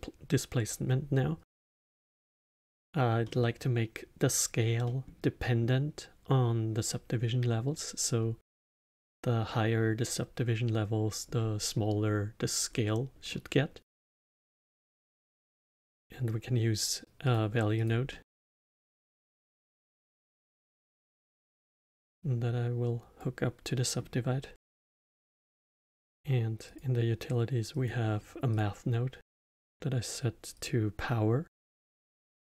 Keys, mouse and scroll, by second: 1.5-8.4 middle drag, 13.2-15.3 middle drag, 15.3 shift+a, 18.0 middle click, 18.5-23.7 drag, 23.7-25.2 middle drag, 25.2 shift+a, 29.4-32.0 drag.